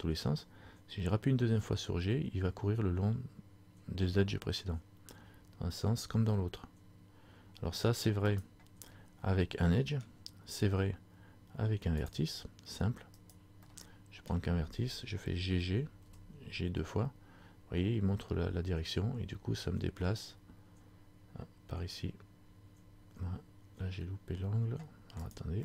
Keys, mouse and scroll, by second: 9.0 scroll up 1, 9.0 middle click, 12.2 click, 13.3 right click, 13.8 middle click, 15.6 g.